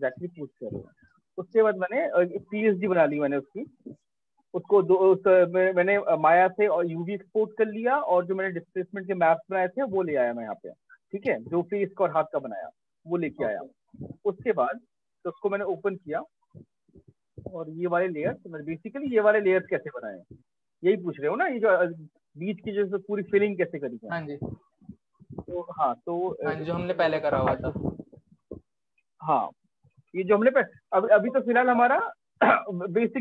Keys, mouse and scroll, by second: 0.6 click, 17.1 click, 17.5 click, 17.9 click, 18.2 click, 20.0 click, 23.5 click, 31.6 click.